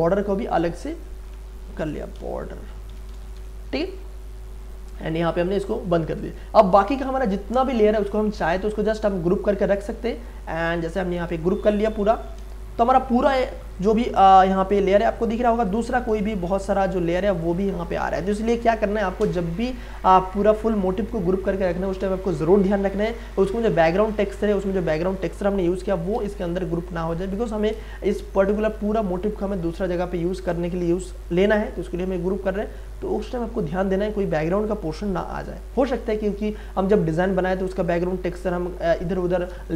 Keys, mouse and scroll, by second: 1.8-3.9 typing, 4.6 click, 7.2-8.5 scroll down 1, 9.1-10.2 scroll up 1, 10.9 shift+click, 12.0 ctrl+g, 13.2 click, 16.2 space, 16.5-22.0 ctrl+drag, 22.0 space, 22.3 click, 22.5 space, 24.4 space, 27.9 space, 28.1-38.1 ctrl+drag.